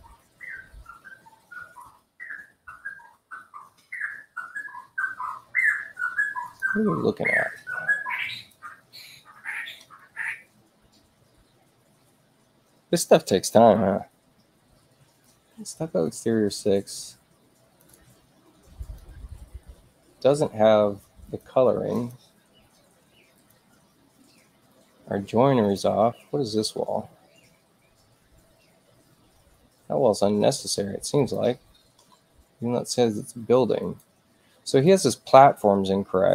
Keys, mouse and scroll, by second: 1.8 ctrl+z, 6.4 click, 8.3 click, 15.1-17.7 drag, 18.7 click, 21.2 click, 21.9 click, 23.3 click, 25.5 click, 31.1 click, 33.7 click, 34.8 click.